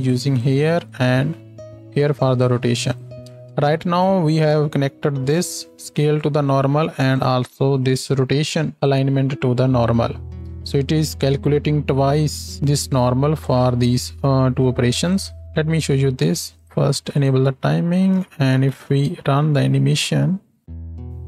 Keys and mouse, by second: 2.9-5.3 ctrl+drag, 3.3 ctrl+space, 18.2 shift+middle click, 18.6 shift+Left, 19.1 space.